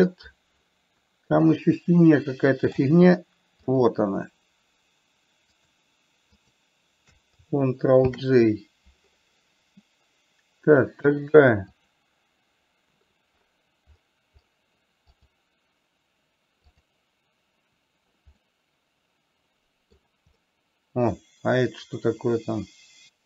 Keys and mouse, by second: 0.0 ctrl+z, 1.4-3.1 middle drag, 4.0 click, 6.7 shift+click, 8.5 ctrl+j, 15.5 click, 18.9-20.4 middle drag, 20.7-23.2 middle drag.